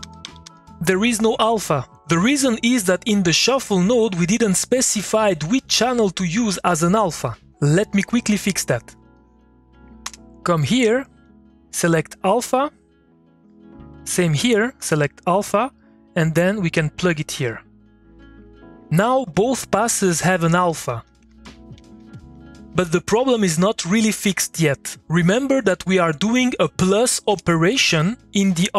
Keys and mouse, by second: 0.0-0.9 typing, 8.4 click, 10.0 Return, 11.2-13.6 drag, 14.0-18.9 drag, 19.2-22.5 typing, 19.7 click, 26.5 click, 27.2 Return.